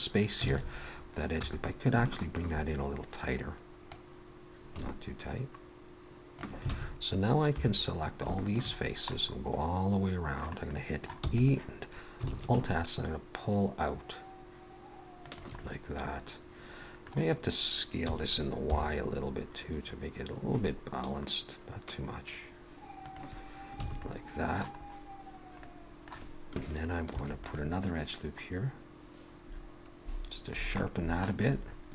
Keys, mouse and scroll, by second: 0.5 alt+a, 1.4 2, 2.2 alt+shift+click, 3.9 click, 6.7 alt+a, 7.4 3, 8.4 alt+shift+click, 8.8-10.7 scroll down 2, 9.1 middle click, 10.7 middle click, 11.2 e, 12.3 alt+s, 15.6 middle click, 18.1 s, 23.8 alt+a, 24.0 middle click, 24.8 scroll up 1, 25.6 middle click, 27.2 ctrl+r, 30.8 middle click.